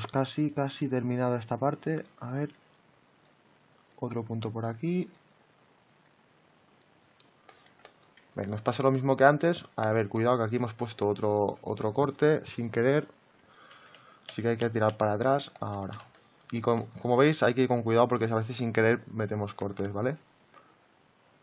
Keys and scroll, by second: 13.7 ctrl+z.